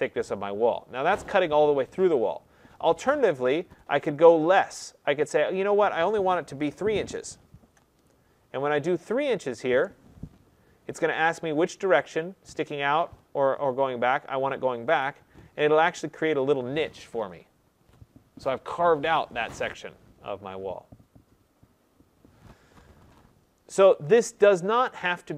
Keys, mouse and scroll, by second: 6.6 3, 7.5 shift+', 9.6 Return, 14.9 click, 15.6-15.9 scroll, 22.8 middle click, 23.9 middle click, 24.0 middle click, 24.8 click.